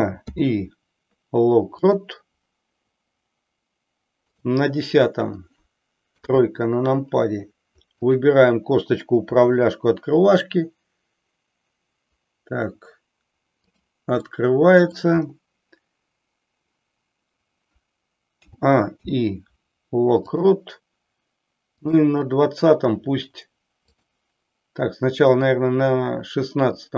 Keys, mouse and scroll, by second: 0.3 i, 4.3 click, 6.2 KP_3, 8.0 click, 9.3 r, 14.2-15.1 middle drag, 18.3 a, 19.0 i, 21.9 click, 23.9 click, 25.4 click.